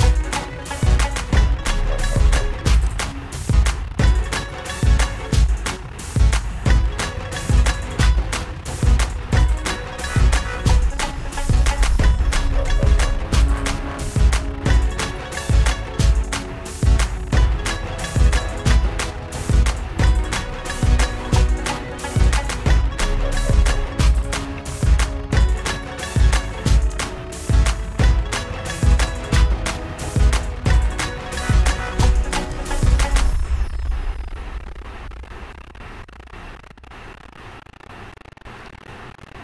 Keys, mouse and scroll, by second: 0.1-2.7 drag, 3.6 click, 4.8 alt+click, 9.0 click, 14.1 click, 15.0 click, 17.2 alt+click, 22.0 click, 27.3 click, 34.0 click, 35.5 click, 38.5 Delete.